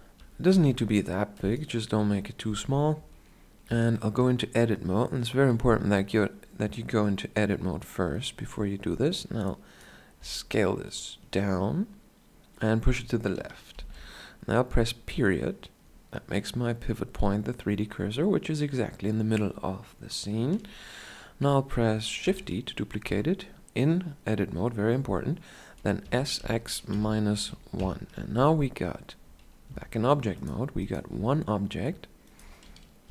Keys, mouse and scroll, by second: 0.5 middle click, 0.5 s, 2.0-3.7 drag, 2.3-8.2 middle drag, 3.7 Tab, 8.2-10.2 drag, 10.2 s, 26.0 s, 28.2 Tab, 29.7 g, 31.1-33.1 right drag, 31.1 r, 33.0 ,.